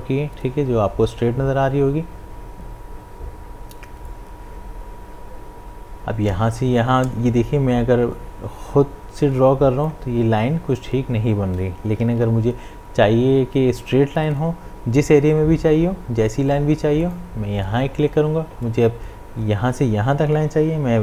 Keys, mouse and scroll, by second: 4.1-12.0 drag, 12.0 ctrl+z, 17.0 click.